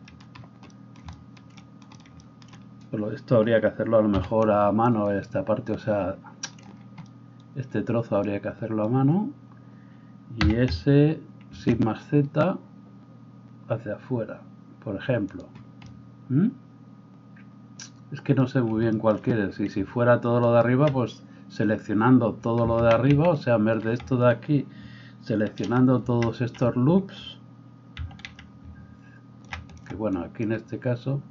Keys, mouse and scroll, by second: 4.1 c, 10.4 s, 20.4 alt+right click, 20.6-31.3 alt+middle drag, 23.1 ctrl+z, 28.0 c.